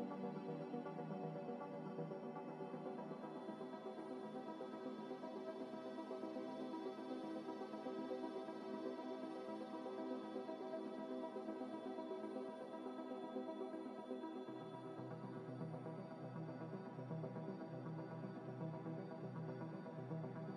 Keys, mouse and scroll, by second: 0.0 scroll up 1, 0.7 u, 1.5 ctrl+z, 2.7 u, 2.7 u, 3.8 scroll up 1, 3.8 scroll down 1, 4.1 scroll up 1, 4.2 s, 5.4 g, 5.5 y, 6.3 x, 7.7 y, 8.1 scroll up 1, 8.7-11.6 typing, 10.2 click, 12.3 Tab, 12.7 Tab, 12.9 a, 14.1 u, 14.5 scroll down 1, 15.0 a, 15.6 scroll up 1, 15.8 s, 16.0 y, 17.3 g, 17.5 y, 18.1 x, 18.8 scroll up 1, 20.0-20.5 typing.